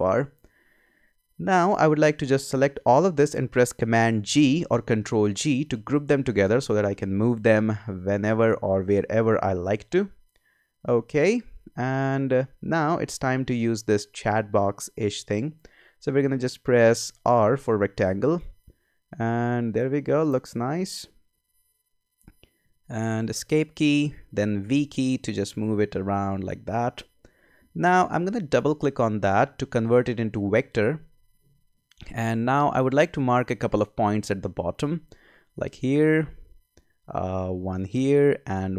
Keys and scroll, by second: 4.3 super+g, 17.3 r, 23.3 Escape, 24.6 v.